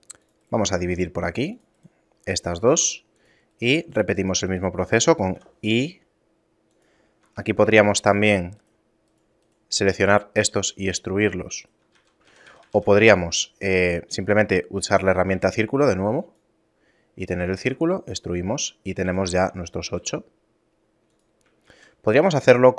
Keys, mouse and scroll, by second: 0.8 ctrl+r, 2.6 ctrl+Tab, 3.5 right click, 3.9 shift+right click, 4.2 right click, 5.3 i, 7.3 ctrl+Tab, 8.1 right click, 8.6 shift+right click, 9.1 right click, 10.0 s, 11.9 ctrl+z, 12.2-12.8 ctrl+z, 15.3 w, 17.6 e, 18.5 Tab, 19.0 a, 19.8 g, 21.7 shift+a.